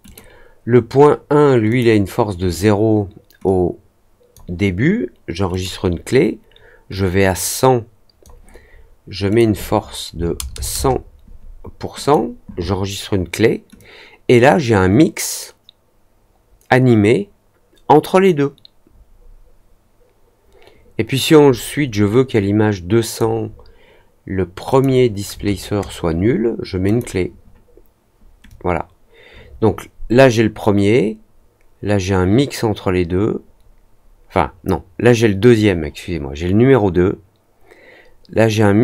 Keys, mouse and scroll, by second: 0.0 click, 1.6 click, 3.4-4.3 drag, 5.4 click, 6.9 click, 9.2 click, 11.9 click, 13.7-23.1 drag, 24.6 click, 26.8 click, 28.4-38.8 drag.